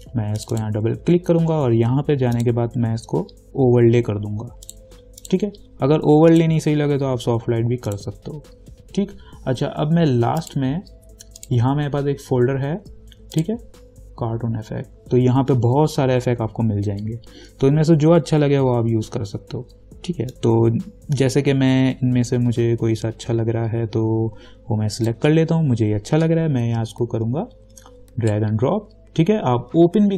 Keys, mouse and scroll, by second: 4.9 click, 10.6 click, 16.3 scroll down 1, 18.5 scroll down 1, 20.5-30.1 drag.